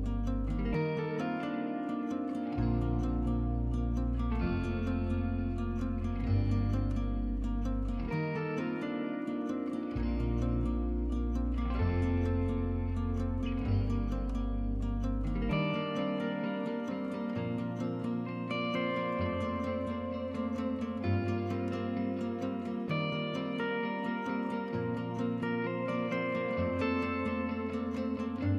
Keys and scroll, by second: 1.9 y, 6.1 ctrl+c, 6.4 ctrl+v, 14.4 1, 15.9 typing, 19.1 1, 21.6 5.